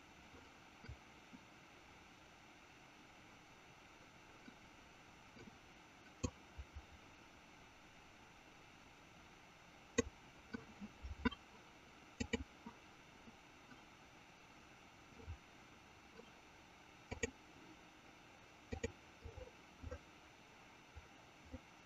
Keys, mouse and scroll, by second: 6.2-10.8 drag, 12.2 click, 17.1 click, 18.7 click.